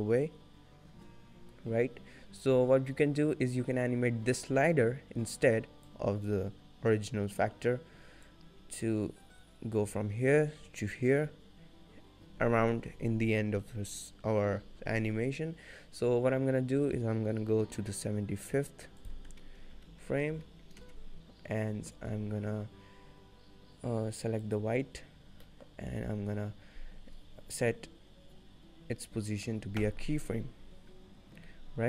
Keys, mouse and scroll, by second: 8.4 click, 19.2 click, 24.8 click, 25.7 middle click, 26.3-26.7 scroll up 8, 30.9-31.4 scroll down 1.